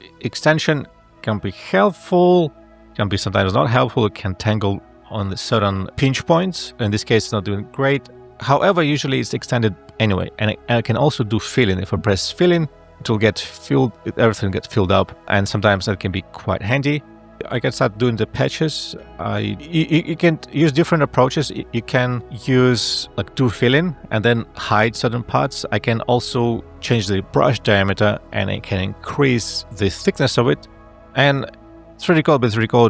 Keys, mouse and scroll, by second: 7.9 0, 8.1 Return, 23.1 space, 26.5 ].